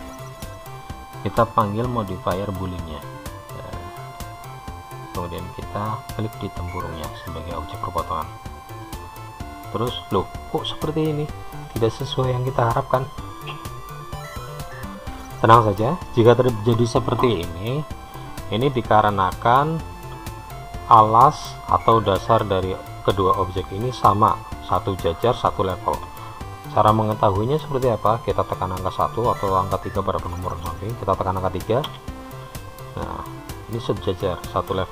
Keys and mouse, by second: 2.0-5.2 drag, 9.4-10.5 middle drag, 19.2-22.3 middle drag, 32.7 KP_3.